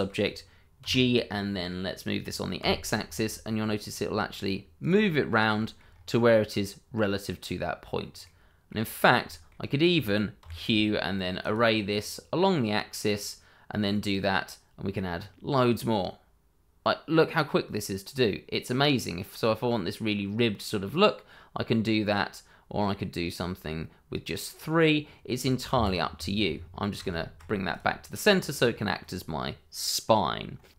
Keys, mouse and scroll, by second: 0.8 g, 2.6 x, 4.8 click, 5.1 middle click, 5.6 shift+middle click, 5.9-6.3 scroll up 1, 6.3 middle click, 9.0 scroll down 1, 9.2 shift+middle click, 10.4 q, 11.4 click, 13.1-15.5 scroll up 1, 21.5-23.9 scroll down 1, 25.1-25.7 scroll down 1, 25.7 Escape, 26.9 ctrl+z, 27.7 click, 28.1 middle click.